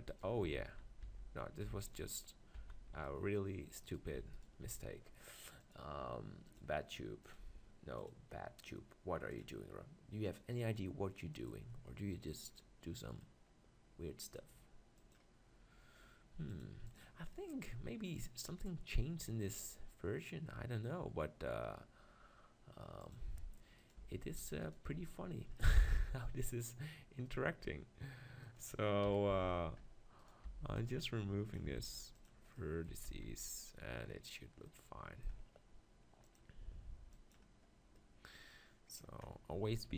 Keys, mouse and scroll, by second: 0.6 ctrl+z, 1.1 ctrl+z, 1.9 ctrl+z, 2.6 ctrl+z, 3.0-7.4 middle drag, 7.4-12.0 drag, 12.0-15.3 middle drag, 15.3-17.0 drag, 17.1-18.3 drag, 17.5-18.9 middle drag, 23.2 click, 24.0 Tab, 24.4 Tab, 24.9 Tab, 26.1 middle click, 29.0 KP_1, 29.3 z, 29.8 middle click, 30.2-32.1 drag, 30.5 b, 31.8 x, 32.9 Tab, 33.6 z, 36.3-38.0 drag, 38.0 middle click, 39.5 Tab.